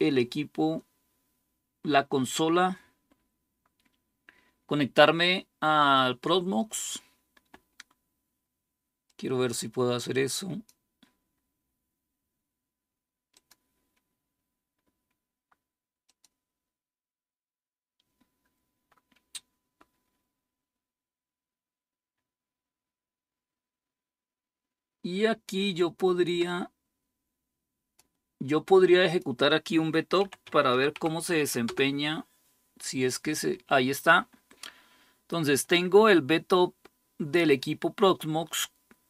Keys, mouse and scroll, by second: 8.8-11.3 drag, 13.1 click, 15.8-28.4 drag, 28.8-39.0 drag.